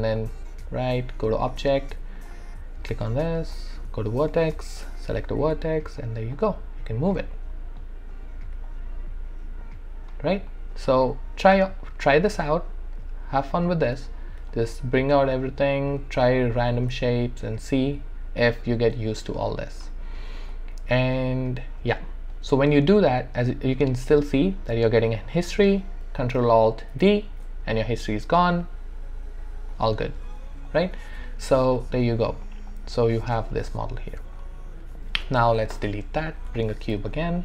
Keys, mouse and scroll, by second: 0.2 right click, 0.2-1.9 right drag, 1.9 q, 2.2 click, 3.9 right click, 4.8 click, 5.4 w, 6.3 click, 14.5 click, 17.0-20.4 drag, 20.4 right click, 21.2-23.0 drag, 26.9 ctrl+alt+d, 30.7 click, 31.1-32.4 alt+drag, 32.4 alt+right click, 32.7 alt+click, 36.6 shift+right click, 37.1 alt+click.